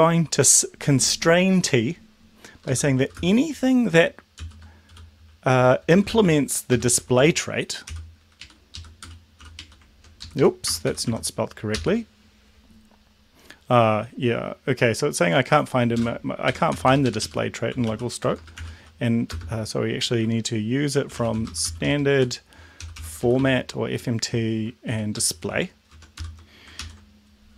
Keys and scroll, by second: 3.0 shift+;, 3.2 shift+space, 4.4-8.1 typing, 8.5 Right, 8.8 Left, 9.1 BackSpace, 9.1 =, 9.5 t, 9.6 Right, 10.2 ctrl+Left, 10.7 BackSpace, 10.9 Delete, 11.1 y, 11.8 ctrl+s, 16.5 Home, 16.8 Return, 16.9 Return, 17.1 Up, 17.3 Up, 17.5-19.4 typing, 21.0-26.2 typing, 26.8 ctrl+s.